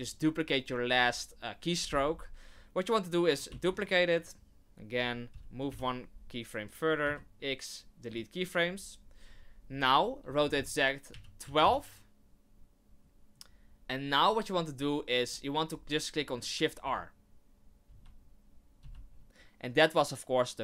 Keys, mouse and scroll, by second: 3.5 shift+d, 5.7 Right, 7.0 x, 10.2 r, 16.8 shift+r, 17.9 shift+r, 18.8 shift+r.